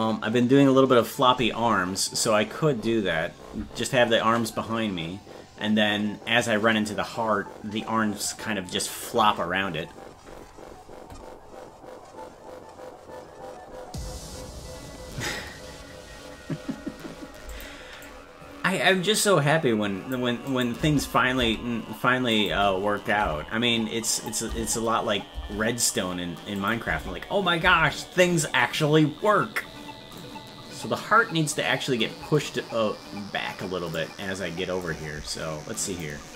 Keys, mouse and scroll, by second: 17.5 click, 18.0-20.1 drag, 20.5 click, 20.8 space, 22.3 click, 22.3 space, 24.1 click, 24.1 space, 26.6 click, 26.8 space, 30.2 click, 31.5-33.9 drag, 34.8-36.0 drag.